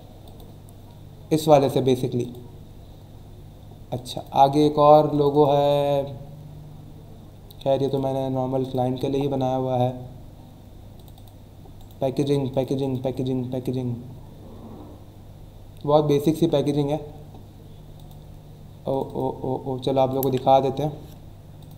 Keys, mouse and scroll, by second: 0.2 click, 2.2 click, 3.9 click, 5.1 click, 7.8 click, 8.6 click, 10.9 click, 11.8 right click, 12.2 click, 12.5 click, 17.9 click, 18.9 click, 21.6 click.